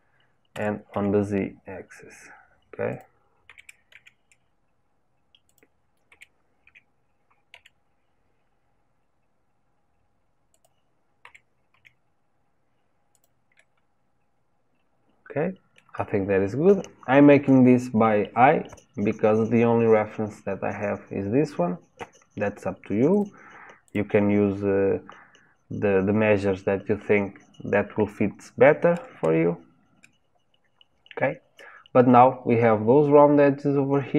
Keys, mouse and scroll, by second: 3.5 g, 6.1 g, 11.2 g, 13.6-16.6 middle drag, 23.1 click, 23.8 click.